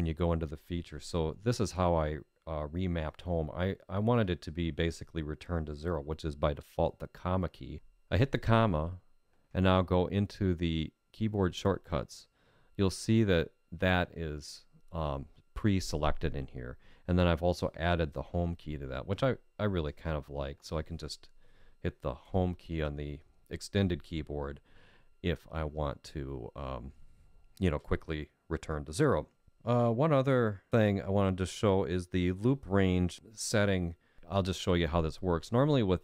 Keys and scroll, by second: 22.2 Home.